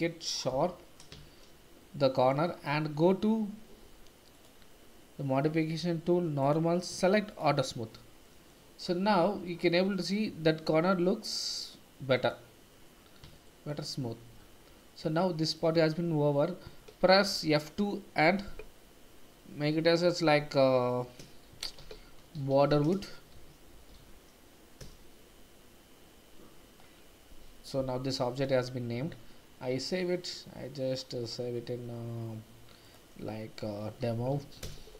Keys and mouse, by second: 0.5 Tab, 1.2 shift+z, 1.8-2.3 drag, 6.4 click, 7.3 click, 8.2 middle drag, 10.0-12.3 middle drag, 13.5 shift+middle drag, 15.2-15.5 shift+middle drag, 17.3 F2, 23.9 o, 29.0 ctrl+s.